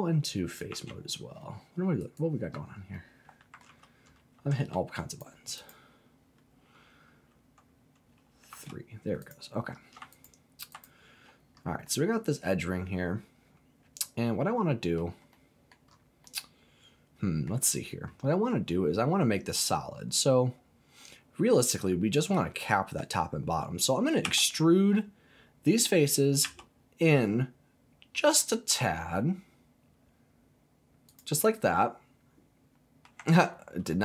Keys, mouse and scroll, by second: 0.7 Tab, 2.0 right click, 2.9 middle click, 3.6 ctrl+z, 5.1 click, 5.6 click, 8.5 3, 9.2 click, 10.1 alt+click, 10.7 alt+click, 11.5 scroll down 1, 11.8-14.9 middle drag, 15.3 middle click, 15.9-16.2 scroll up 2, 16.2-17.5 middle drag, 24.2 e, 26.4 s, 31.1 click, 31.4-33.1 middle drag, 33.4 ctrl+z.